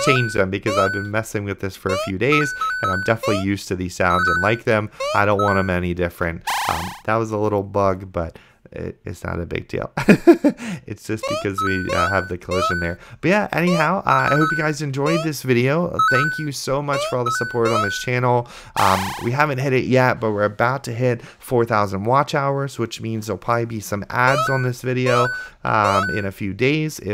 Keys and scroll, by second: 1.2-3.4 typing, 6.4 a, 11.5 a, 11.5 space, 13.0-15.3 typing, 17.9 d, 18.7 a, 24.3-27.1 typing.